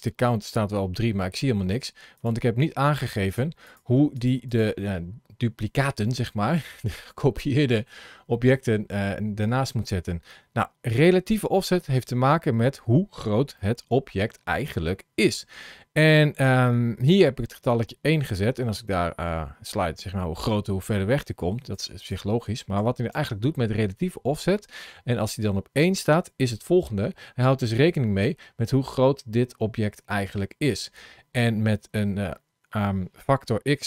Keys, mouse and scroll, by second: 2.0 click, 3.3 click, 3.5 click, 4.1 click, 4.4 click, 12.0 scroll up 1, 12.6 scroll up 1, 13.4 shift+middle click, 17.5 click, 21.8 click, 27.0 ctrl+shift+a.